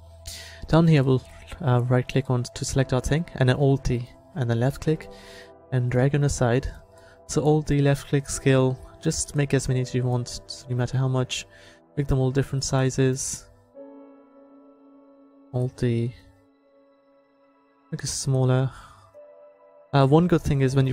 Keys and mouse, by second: 3.8 alt+d, 5.9 s, 9.3 alt+d, 9.7-12.5 drag, 11.6 s, 12.5 alt+d, 13.4-17.7 drag, 15.4 alt+d, 17.7 s, 20.3 alt+d.